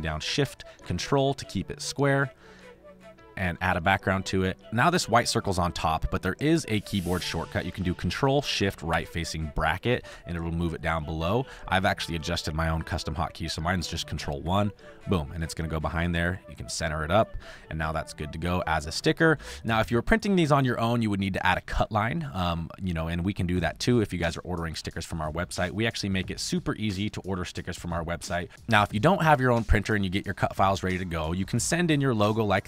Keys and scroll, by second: 3.6 v, 8.8 ctrl+shift+[, 14.4 ctrl+1, 17.8 space, 18.7 space, 19.3 space, 21.7 space, 22.4 space.